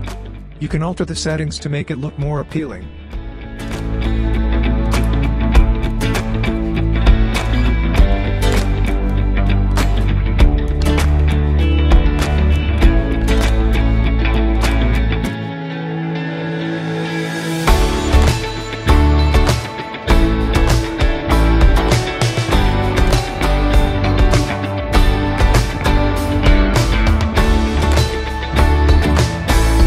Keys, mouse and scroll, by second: 4.9-6.9 drag, 4.9 typing, 18.0-20.2 typing, 20.9-22.8 drag, 26.4-26.8 scroll down 1, 27.0-28.5 alt+drag, 28.8-29.5 alt+middle drag.